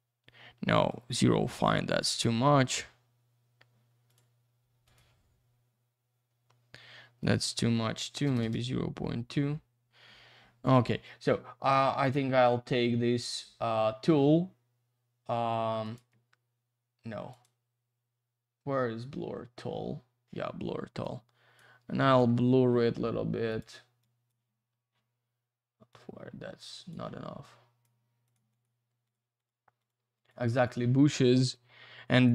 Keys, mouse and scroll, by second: 0.9 click, 2.6 3, 4.0 click, 4.1 click, 4.8 click, 4.9 click, 7.2 click, 7.3 click, 8.2 BackSpace, 8.4 Return, 12.0 click, 12.1 click, 15.8 right click, 15.9 right click, 17.3 click, 17.4 click, 21.0 click, 22.2 ctrl+z, 23.5 click, 23.6 click, 24.0 click, 25.9 click, 27.4 click, 28.2 click, 28.3 click, 28.5 click, 28.6 double click, 29.0 click, 29.1 click, 29.4 click, 29.5 double click, 29.8 click, 29.9 click, 30.1 click, 30.3 double click, 30.6 click, 30.7 click, 31.5 click.